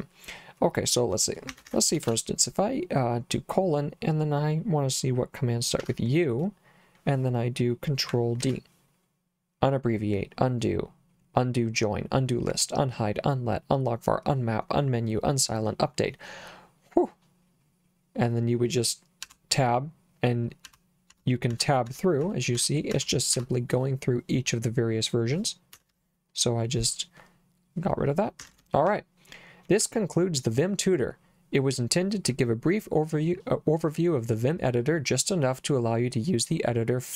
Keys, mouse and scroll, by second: 1.5 Escape, 2.0 shift+;, 5.8 u, 8.4 ctrl+d, 19.2 Tab, 20.7 Tab, 21.1 Tab, 21.6 Tab, 21.9 Tab, 22.3 Tab, 22.6 Tab, 23.0 Tab, 23.4 Tab, 25.8 Escape, 28.4 Escape, 28.9 j, 29.8 j.